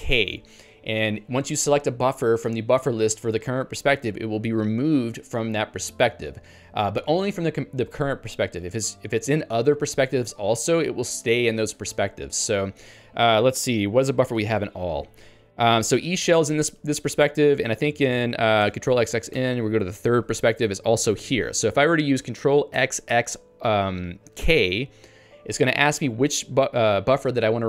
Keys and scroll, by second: 12.4 ctrl+g, 16.6 ctrl+g.